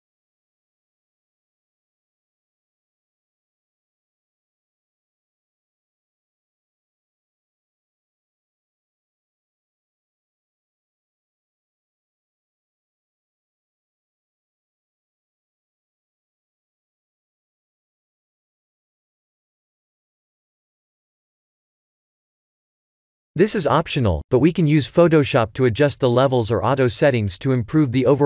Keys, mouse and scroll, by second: 2.2 click, 6.0 1, 12.4 click, 13.8 ctrl+s, 15.0 click, 15.0 middle click, 15.0 KP_0, 15.1 click, 15.2 3, 15.4 1.